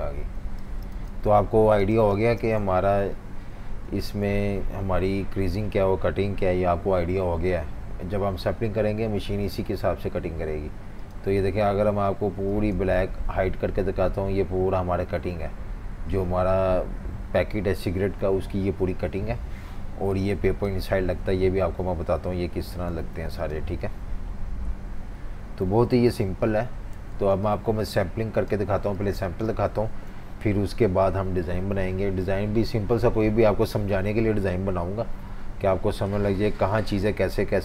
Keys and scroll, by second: 0.0 super+-, 9.7 F19, 13.1 super+3, 25.3 F19, 26.1 super+-, 26.3 super+-, 26.9 typing, 29.0 v, 29.1 space, 31.1 F18.